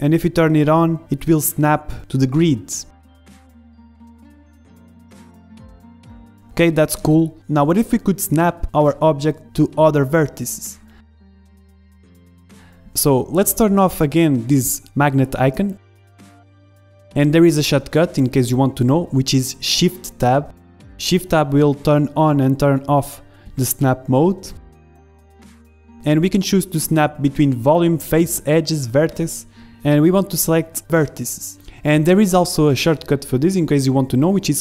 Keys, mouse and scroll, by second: 1.3 g, 2.3-4.0 middle drag, 3.2 f, 4.1 g, 5.5 middle click, 6.9 g, 7.2 middle click, 8.0 click, 8.8 z, 9.4 g, 11.1-12.6 drag, 11.4 ctrl+z, 11.7 ctrl+z, 12.1 ctrl+z, 12.6 middle click, 13.0 click, 13.0 z, 13.5-16.0 middle drag, 17.3-19.9 middle drag, 19.9-21.8 drag, 21.8 shift+Tab, 22.3 shift+Tab, 22.7 shift+Tab, 23.1 shift+Tab, 23.6 shift+Tab, 24.0 shift+Tab, 24.6 shift+Tab, 25.2 shift+Tab, 25.9 shift+Tab, 26.7-28.6 drag, 32.4 ctrl+shift+Tab.